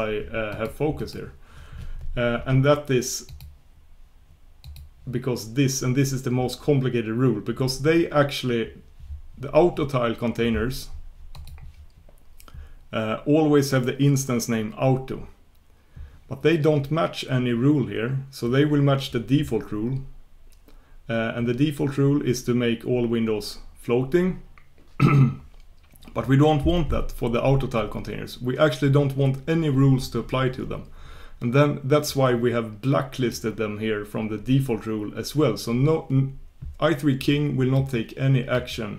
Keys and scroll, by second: 3.3 ctrl+super+Return, 32.1 ctrl+super+Return.